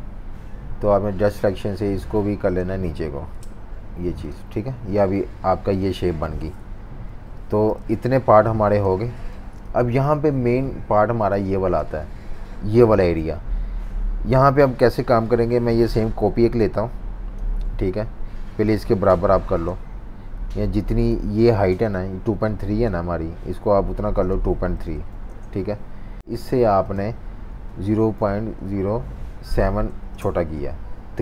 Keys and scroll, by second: 3.3 Page_Down, 6.6 super+-, 6.7 super+-, 6.9 super+-, 7.8 z, 9.4 typing, 11.0-12.0 typing, 24.5-25.6 typing, 27.5 -, 28.2 0, 28.6 ., 29.6 7, 30.1 Return.